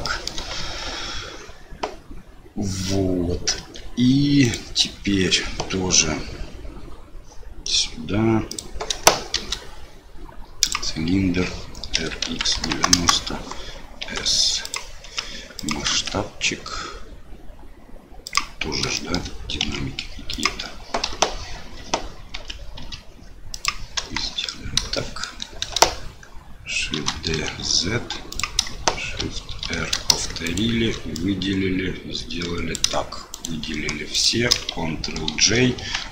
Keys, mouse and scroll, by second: 0.2 shift+middle click, 3.6 Tab, 4.4 click, 8.5 click, 9.3 shift+a, 11.9 r, 14.0 s, 15.0 s, 15.9 s, 19.0 shift+middle click, 19.6 s, 21.0 KP_7, 22.3 s, 24.0 KP_1, 25.1 shift+middle click, 27.1 shift+d, 29.2 shift+r, 29.6 shift+r, 30.4 shift+click, 31.2-32.9 drag, 33.3 shift+click, 34.1 shift+click, 35.3 ctrl+j.